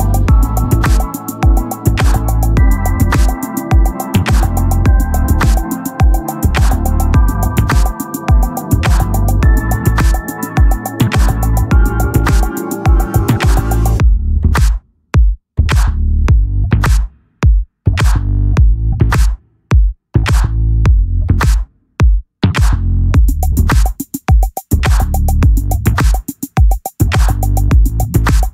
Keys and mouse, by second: 12.0 click, 20.1 click, 23.2 click, 27.3 click.